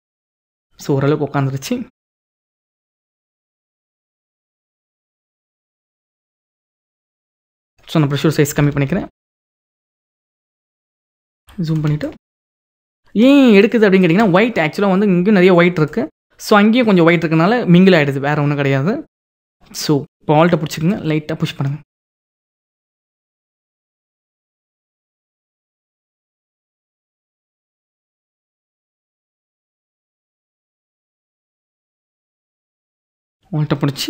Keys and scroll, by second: 8.2 [, 10.7 ctrl+=, 11.7 ctrl+=.